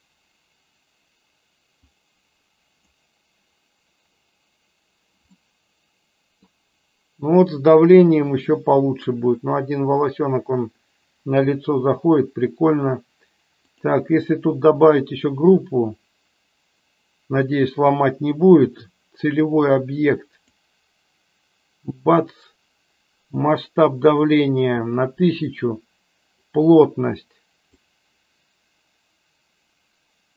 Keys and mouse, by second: 2.0 click, 5.6-6.6 middle drag, 13.9-14.9 drag, 19.3-20.7 drag, 26.4-27.9 drag.